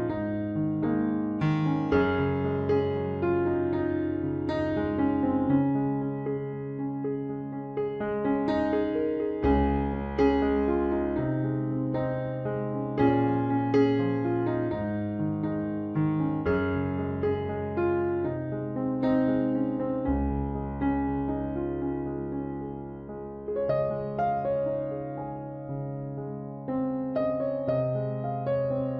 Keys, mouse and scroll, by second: 3.4 c, 4.3-5.8 right drag, 5.0 i, 5.8 middle click, 6.7 click, 7.8 c, 9.6 c, 10.8 c, 12.0-13.3 right drag, 12.6 click, 13.3 c, 13.6 right click, 15.1-16.8 drag, 15.6-16.8 right drag, 16.9-20.1 typing, 22.1 middle click, 22.6 KP_1, 23.3 z, 25.5 KP_3, 26.1 z, 26.5 c, 28.4 middle click.